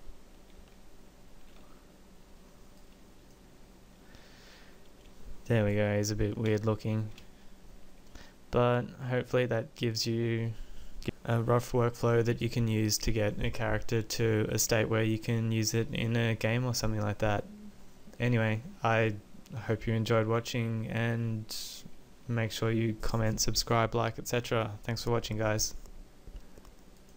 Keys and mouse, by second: 4.8-6.0 drag, 17.3-27.1 middle drag.